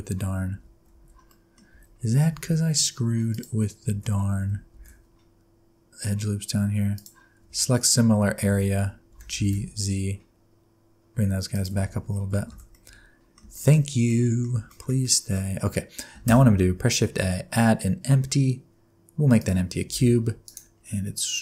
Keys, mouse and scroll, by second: 0.6 Tab, 0.9 alt+z, 1.3 middle click, 1.6-2.2 alt+scroll up 4, 1.8 alt+z, 2.3 alt+z, 2.5-2.9 scroll up 2, 3.3 click, 3.8 alt+z, 4.7 shift+g, 7.4 alt+z, 7.9-8.4 scroll down 5, 8.4 alt+z, 8.8 scroll up 2, 9.1 g, 11.8 Tab, 12.0-12.5 scroll down 5, 12.5 alt+a, 12.7 middle click, 13.5 shift+middle click, 13.7-14.5 scroll down 3, 14.0 middle click, 14.7 shift+middle click, 15.0 middle click, 15.3-16.1 scroll down 2, 16.2 shift+a, 16.4-16.8 scroll down 3, 19.8 g, 20.7-21.4 scroll down 4.